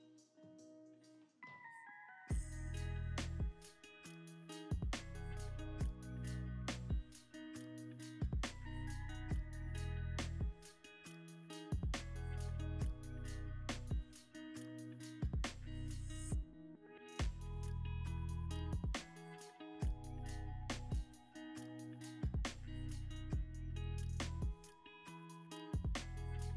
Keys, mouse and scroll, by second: 1.2 scroll down 1, 1.5 click, 4.0-5.3 scroll up 1, 6.7 shift+click, 9.1 shift+click, 12.9 shift+click, 17.8 shift+click, 18.7 middle click, 20.9 double click.